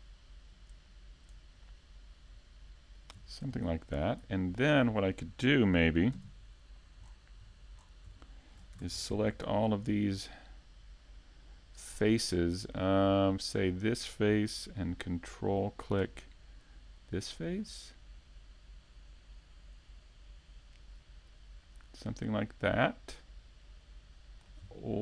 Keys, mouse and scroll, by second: 1.0 right click, 4.0 shift+d, 6.3 click, 7.5 s, 9.0 click, 9.2-9.8 scroll up 4, 9.6 middle click, 10.9 Tab, 11.3-11.6 scroll down 1, 11.6 a, 11.9 Tab, 12.2 scroll down 1, 12.4 a, 12.7 middle click, 13.2-13.6 scroll down 3, 13.5 shift+middle click, 14.1 scroll down 1, 14.3 shift+middle click, 14.7-15.6 scroll up 5, 15.1 shift+middle click, 16.1 right click, 16.5 shift+middle click, 17.0 middle click, 17.8 shift+middle click, 18.9 click, 20.7-21.7 scroll down 5, 20.9 a, 21.6 middle click, 22.2 shift+middle click, 22.5 middle click, 23.8 shift+c, 24.4 shift+middle click.